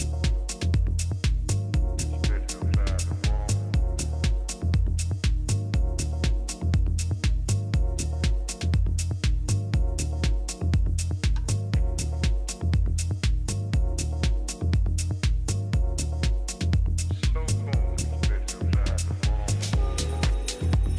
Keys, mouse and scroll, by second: 0.8 a, 1.5 a, 3.0 a, 3.8 a, 6.3 a, 6.6 a, 7.9-9.8 middle drag, 10.9 b, 15.4 right click, 15.5-17.1 drag.